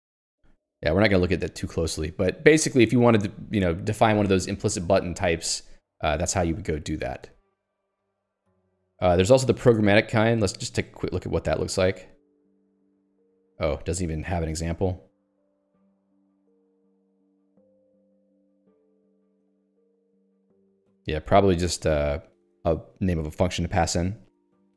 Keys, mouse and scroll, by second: 1.6 ctrl+u, 7.8 middle click, 9.9 middle click, 10.5 scroll down 1, 11.4 middle click, 12.0 scroll down 1, 13.3 scroll up 1, 17.1 scroll down 1, 19.3-20.2 scroll down 1, 20.2 scroll down 1, 20.8 scroll down 1, 23.5 click.